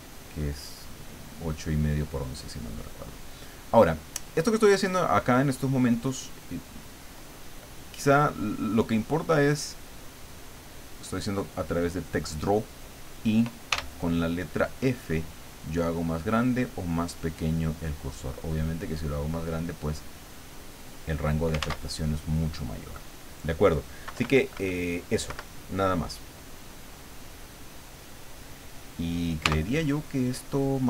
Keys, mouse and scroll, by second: 0.7-3.2 drag, 3.6-5.1 middle drag, 9.7 click, 11.0 click, 13.7 f, 19.3 click, 20.0 click, 21.6 ctrl+z, 22.9 click, 24.1 KP_Subtract, 25.2 KP_Subtract, 26.3-27.6 drag, 29.4 t.